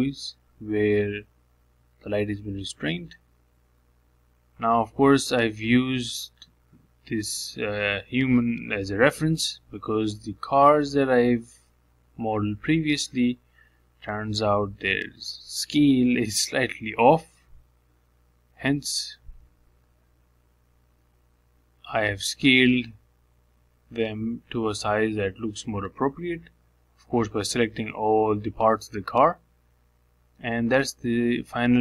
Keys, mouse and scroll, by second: 0.5-1.7 middle drag, 1.7-2.5 scroll down 1, 2.5 Tab, 3.0-4.0 shift+middle drag, 4.0 scroll up 2, 4.3 shift+middle click, 4.8-5.4 scroll down 2, 5.4 drag, 6.6 g, 8.3-9.5 middle drag, 9.5 scroll down 1, 9.8 shift+middle click, 10.4 scroll down 1, 10.7 shift+middle click, 11.6-12.1 scroll up 2, 12.1 shift+middle click, 12.9 g, 15.3 g, 16.3 middle click, 17.2 KP_Decimal, 17.5 scroll down 2, 17.7-19.3 middle drag, 19.3 g, 20.8 KP_1, 21.9 g, 24.7-25.3 scroll down 7, 25.3-27.3 shift+middle drag, 27.6 g, 30.5-31.0 scroll up 2, 31.0 shift+middle click, 31.3-31.8 scroll up 2.